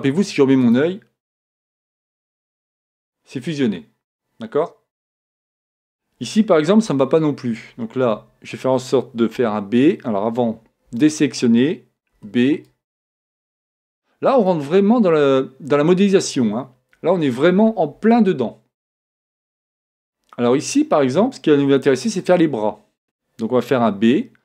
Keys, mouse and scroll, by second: 1.0-4.3 drag, 6.9 b, 9.4 b, 10.9 a, 12.2 b, 14.5-16.3 drag, 21.6 a, 23.8 b.